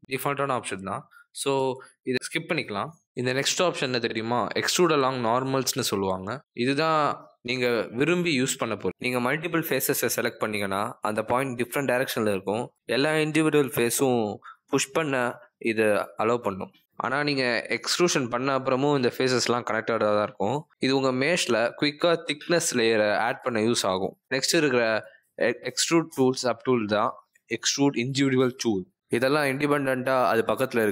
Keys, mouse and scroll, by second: 5.8 click, 6.2 shift+click, 6.6 shift+click, 7.0 middle click, 8.3 middle click, 10.5 click, 14.5 middle click, 20.9 middle click, 23.2 ctrl+z, 23.7 middle click, 25.0 click, 30.0 right click.